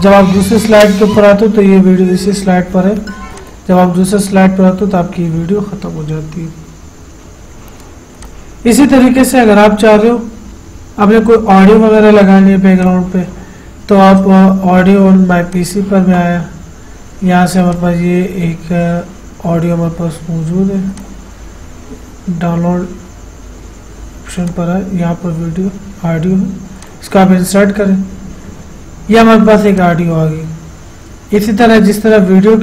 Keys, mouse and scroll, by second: 3.7 click, 8.5 click, 13.1 click, 18.0 click, 21.2 click, 24.7 click, 27.0 click, 30.0-32.6 drag.